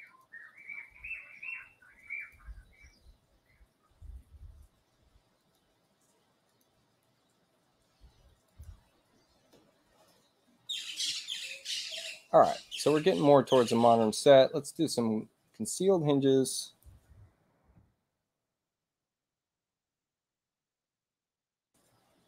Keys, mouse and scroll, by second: 0.1 click, 2.2 click, 5.4 click, 6.5 click, 8.5 click, 15.6 click, 16.8-18.2 typing.